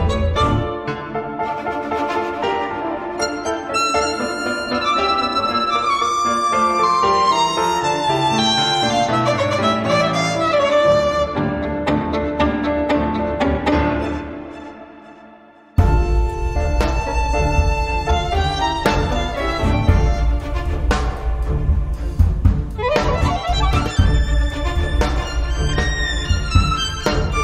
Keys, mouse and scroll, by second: 0.2 click, 1.6 click, 2.4 right click, 3.7 click, 5.0 click, 6.1-8.5 typing, 9.3 click, 10.2 click, 11.8-20.5 drag, 20.9 click, 22.7 click, 23.7-24.2 scroll down 1, 24.6-26.4 drag.